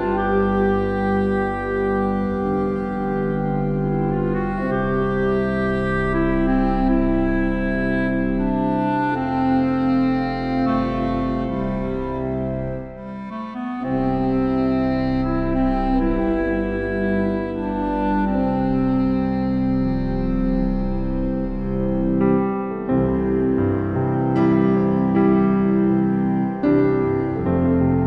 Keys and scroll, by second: 11.6 ctrl+t.